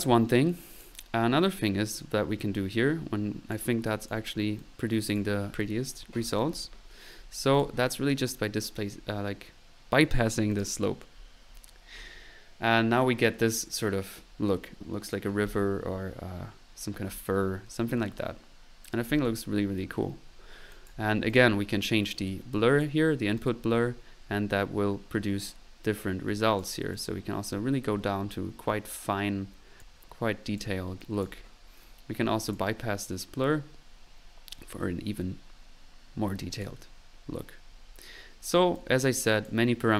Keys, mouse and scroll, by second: 0.0 middle click, 0.5 click, 2.7-3.7 drag, 3.9 click, 4.6 click, 7.5-8.6 middle drag, 10.5 click, 20.5-22.2 typing, 20.7 click, 21.1 click, 21.6 drag, 22.8 click, 26.8 click, 30.8 click, 31.3 click, 32.4 click, 36.5 click, 38.7-39.4 drag, 39.6 click.